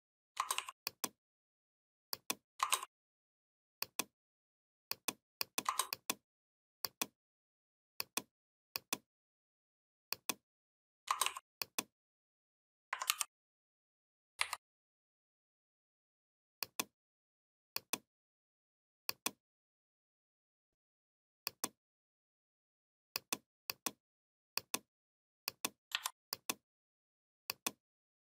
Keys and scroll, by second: 12.9 ctrl+g, 14.2 Down, 25.8 3.